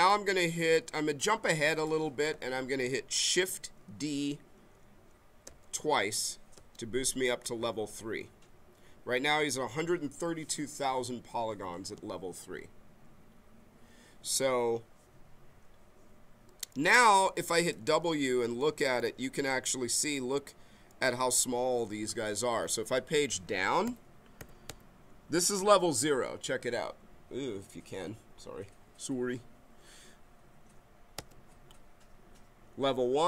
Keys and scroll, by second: 5.4 shift+d, 18.0 w, 23.8 Page_Down, 31.2 Page_Up.